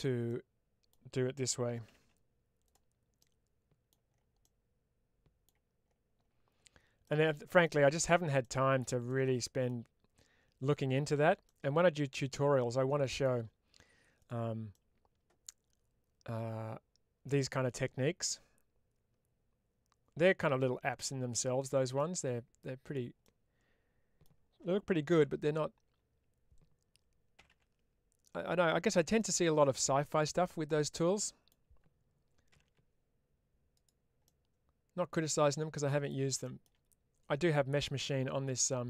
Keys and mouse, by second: 0.1 middle click, 2.5 click, 3.1 middle click, 4.4 middle click, 9.1 middle click, 11.4-13.1 middle drag, 14.0 click, 14.7-21.5 middle drag, 22.7 click, 23.1-24.1 middle drag, 28.7 click, 29.1 middle click, 30.9 middle click, 33.6 click, 34.2-36.0 middle drag, 38.4 click.